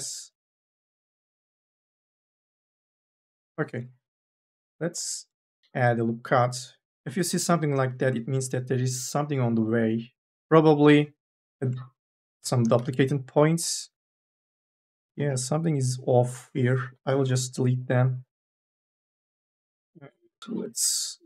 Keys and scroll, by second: 4.1 k, 4.4 l, 9.2 2, 10.0 1, 11.0 1, 11.2 3, 12.6 1, 12.7 3, 13.6 1, 14.9 3, 15.1 e, 16.7 Delete, 18.9 u, 19.4 2, 19.9 e, 20.3 Delete.